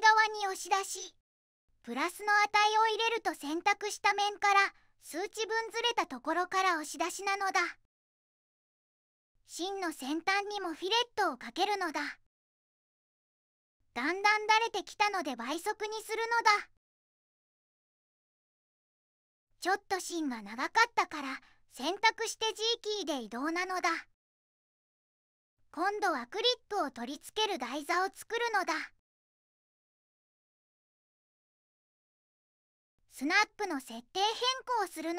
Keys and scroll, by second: 1.4 shift+Right, 1.9 5, 2.7 Return, 7.1 2, 17.3 2, 17.4 Tab, 18.4 2, 18.5 Tab, 18.7 0, 18.8 ., 18.9 5, 19.0 Tab, 20.6 Return, 22.5 4, 23.0 g.